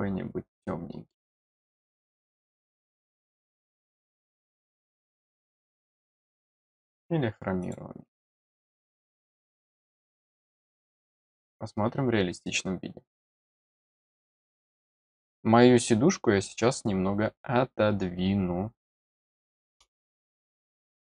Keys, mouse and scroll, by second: 0.9-1.9 scroll up 2, 1.9-3.6 drag, 4.3-5.2 scroll down 3, 6.4 click, 7.5 click, 9.1 click, 10.6 click, 11.3 click, 19.4 middle click, 20.4 middle click.